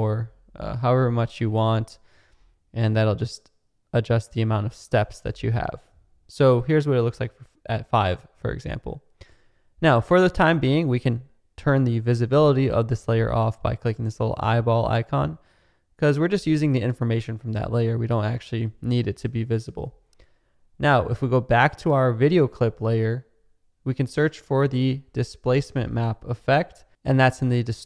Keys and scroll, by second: 25.0-26.5 typing.